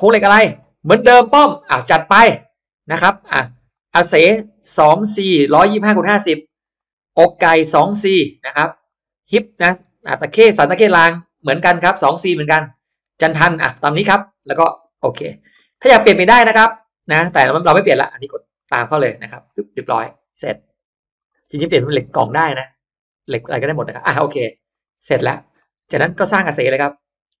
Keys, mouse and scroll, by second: 0.5 click, 1.5 click, 3.6 click, 3.8 click, 4.0 click, 4.9 2, 6.2 click, 6.4 click, 7.9 2, 8.3 click, 8.5 click, 9.8 2, 10.7 click, 11.2 click, 11.4 2, 14.5 click, 14.9 click, 15.1 2, 15.4 click, 18.5 click, 19.3 click, 20.3-21.1 drag, 24.6 click, 25.1 drag, 25.4-25.8 scroll up 1, 25.5 middle click.